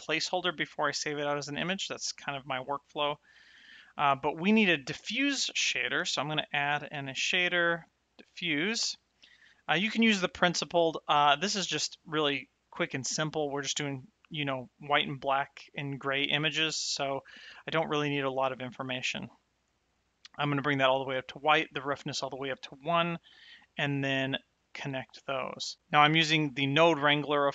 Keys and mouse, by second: 2.6 middle click, 5.3 click, 8.1 click, 10.6 middle click, 11.8 click, 17.2 click, 23.1 ctrl+shift+click.